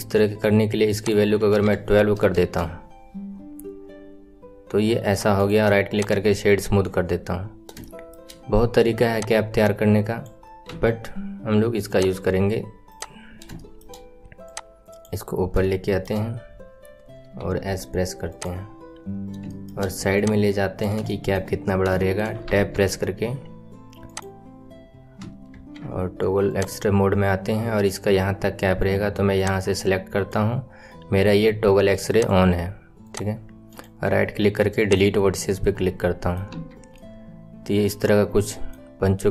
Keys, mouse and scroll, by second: 0.7 right click, 0.9-4.0 drag, 6.0 right click, 7.7-9.0 shift+middle drag, 9.0 click, 10.6 s, 12.8 click, 13.2-13.5 scroll up 4, 13.5-14.4 shift+middle drag, 14.4 click, 15.2-15.6 scroll up 2, 15.6-17.3 shift+middle drag, 17.3 s, 19.1 scroll down 3, 19.4-20.1 shift+middle drag, 20.1 click, 21.0-21.6 right drag, 21.0 shift+middle click, 21.6 scroll up 4, 21.9 right click, 21.9 shift+middle click, 22.4 Tab, 24.0-25.4 drag, 25.4 alt+z, 26.4 click, 29.3 click, 32.0 click, 33.7 right click, 35.6 middle click, 36.5 Tab, 36.9-38.1 middle drag, 38.1-39.3 right drag.